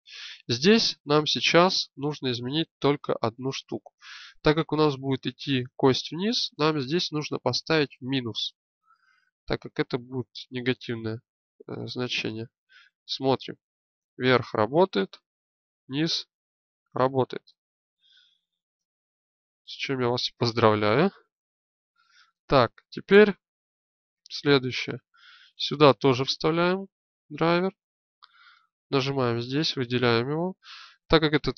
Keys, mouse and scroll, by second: 0.7-6.4 middle drag, 11.6 shift+space, 13.6 middle click, 18.4 shift+space, 21.0 alt+g, 31.4-31.5 middle drag.